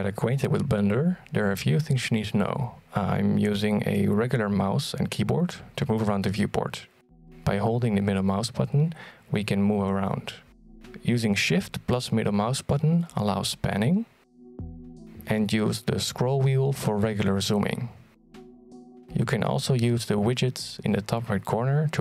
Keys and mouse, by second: 1.2-6.8 middle drag, 8.2-9.5 shift+middle drag, 9.7-10.7 middle drag, 11.1-12.5 shift+middle drag, 12.7-15.4 middle drag, 15.5-16.7 shift+middle drag, 18.1 middle click, 18.8 shift+middle click, 19.7 middle click, 20.8 middle click, 21.4 shift+middle click.